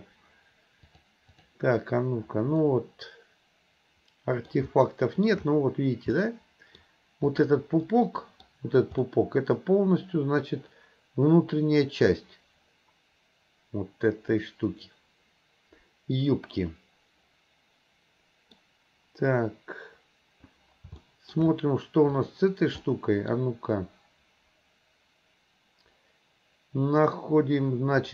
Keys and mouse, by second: 0.9 click, 2.6-4.5 middle drag, 4.9-5.3 shift+middle drag, 6.2-6.8 middle drag, 7.3 click, 7.9-8.5 middle drag, 9.1-18.6 middle drag, 21.0-21.4 shift+middle drag, 22.2 click, 22.9-23.3 middle drag.